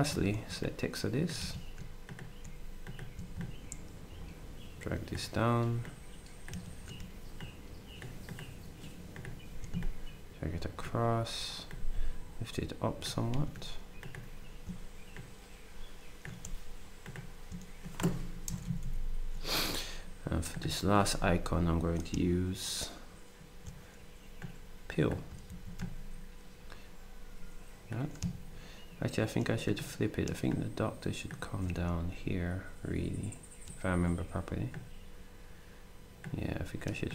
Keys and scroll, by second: 0.4 ctrl+shift+d, 1.4 z, 6.5 z, 13.3 z, 18.5 Up, 18.6 Up, 18.8 Up, 25.5 ctrl+d.